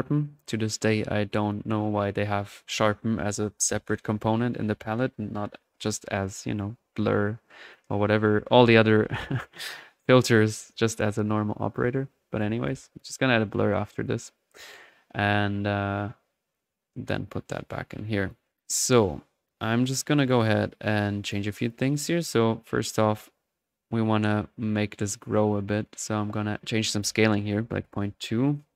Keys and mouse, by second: 1.4 click, 5.0 middle click, 7.2-8.1 drag, 8.7 click, 9.6 click, 11.8 right click, 12.4-13.1 typing, 13.5 click, 13.7-14.7 drag, 14.7-17.2 drag, 18.3 click, 18.6 drag, 19.6-20.8 drag, 20.8 middle click, 21.2 click, 22.9-24.0 middle drag, 26.7 click.